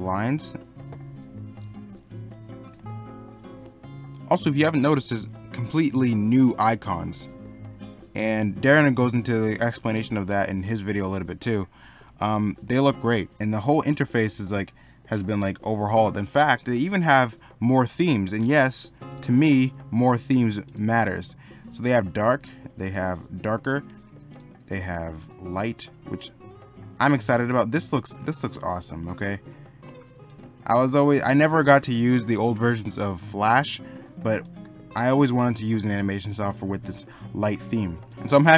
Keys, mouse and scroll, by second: 0.8 middle click, 9.0 middle click, 13.4 middle click.